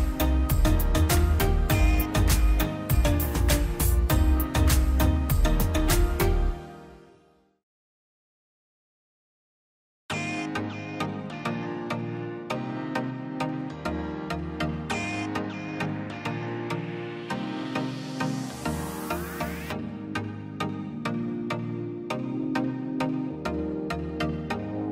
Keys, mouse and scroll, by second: 0.4 click, 1.9 scroll up 1, 2.1 click, 3.2 ctrl+z, 4.2 middle click, 4.6 click, 6.1 middle click, 7.1 click, 7.3 scroll up 1, 7.7-11.1 drag, 11.8-12.7 scroll up 1, 12.9 click, 13.1-13.7 scroll down 2, 13.3 middle click, 14.4-15.7 drag, 15.7 middle click, 16.7 click, 16.9-18.0 scroll down 3, 17.2 click, 17.6 middle click, 18.6 middle click, 19.9 click, 20.3 right click, 20.8 click, 21.5 scroll down 1, 21.7 click, 22.7 right click, 23.8 click.